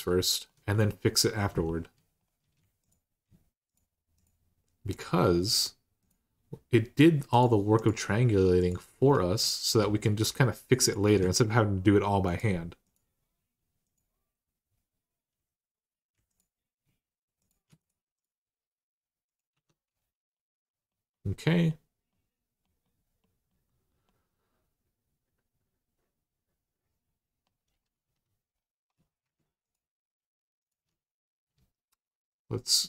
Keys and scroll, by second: 19.3 Tab, 27.8 Tab.